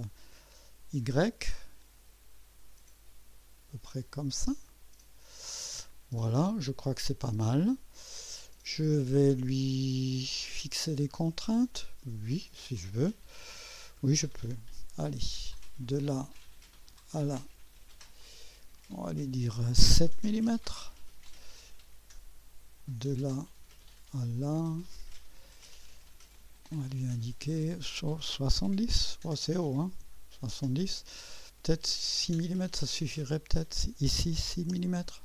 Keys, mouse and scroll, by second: 4.6 click, 8.4 right click, 13.6 right click, 14.4 right click, 15.9 click, 17.0 click, 18.2 click, 20.2 7, 20.5 Return, 22.8 click, 24.6 click, 26.3 click, 28.3-29.4 typing, 29.9 Return, 33.0 click, 34.5 typing.